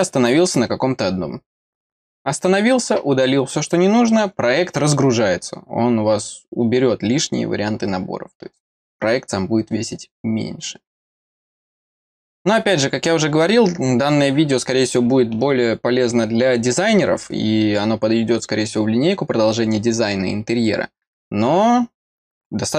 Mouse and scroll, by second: 11.9-13.4 scroll down 2, 13.4 scroll down 1.